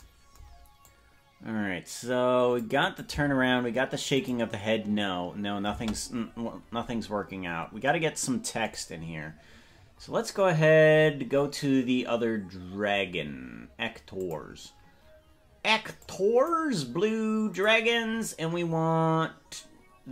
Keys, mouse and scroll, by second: 0.9-2.7 drag, 2.8 click, 3.3 space, 4.2 click, 5.9 space, 9.9-10.3 scroll down 13, 11.1-11.7 scroll up 10, 13.3 scroll down 1, 14.2 click, 14.7-15.1 scroll down 2, 16.0 click, 17.5 click, 18.1 scroll down 1.